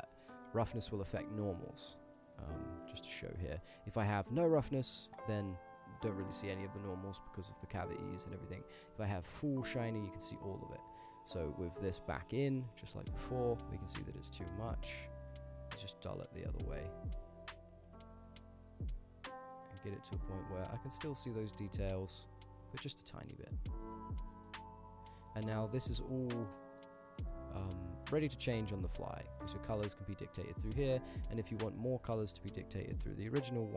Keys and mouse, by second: 0.5 middle drag, 1.0 middle drag, 1.3 middle click, 2.1 middle click, 2.4 middle click, 2.7 middle click, 3.5 click, 4.1-7.4 drag, 7.9-9.1 drag, 10.9 ctrl+z, 11.2-12.2 drag, 12.5 click, 13.0 ctrl+shift+click, 14.4-15.4 drag, 15.6-16.3 drag, 16.7 ctrl+shift+click, 17.2 click, 17.9 ctrl+shift+click, 18.3 middle click, 19.5-22.9 drag, 23.7 middle drag, 24.3 ctrl+click, 24.4 middle click, 25.2 middle click, 25.7 middle click, 26.3 middle click, 26.7 middle click, 27.2 middle click, 27.9 middle click, 28.4 click, 29.1 click, 29.7 click, 30.1 click, 31.6 middle drag, 32.4 ctrl+z, 32.4 middle click, 32.9 middle click.